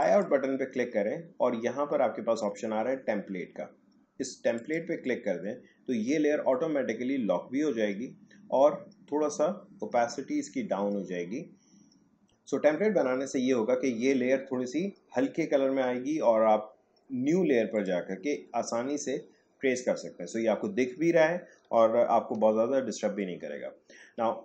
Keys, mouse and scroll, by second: 0.0 click, 4.5 click, 17.7 click, 22.3 click.